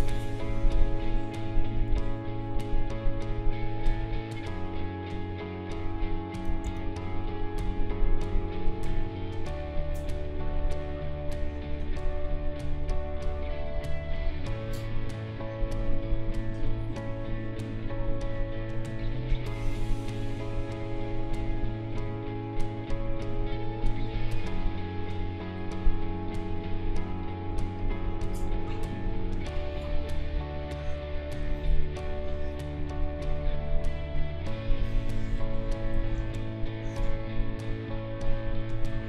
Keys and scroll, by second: 6.6 ctrl+z, 27.5 space, 38.3 ctrl+-.